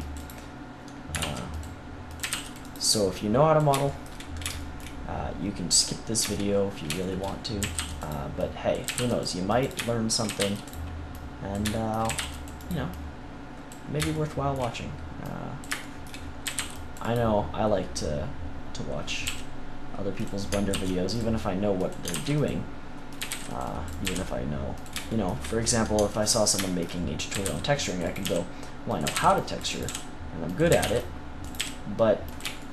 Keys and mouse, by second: 1.1 ctrl+r, 1.9 click, 2.1 a, 2.2 c, 3.8 click, 7.5 a, 7.7 c, 8.0-10.0 drag, 8.3-10.0 right drag, 8.8 a, 8.9 c, 10.2 a, 10.3 c, 12.0 a, 12.1 c, 12.4-13.6 drag, 15.3-17.1 drag, 16.4 a, 16.5 c, 19.2 g, 20.2 click, 20.6 ctrl+r, 21.1 click, 22.0 ctrl+r, 22.5 click, 23.1 a, 23.2 c, 24.0 g, 27.3-31.5 typing, 28.9 click.